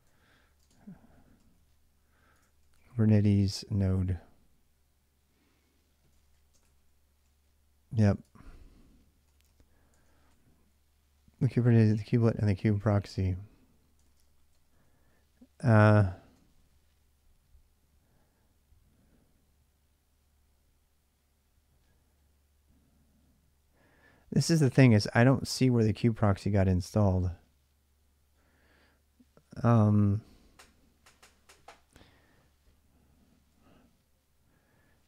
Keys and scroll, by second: 0.0-4.2 typing, 5.7-16.1 typing, 9.7 ctrl+[, 24.2-25.5 typing.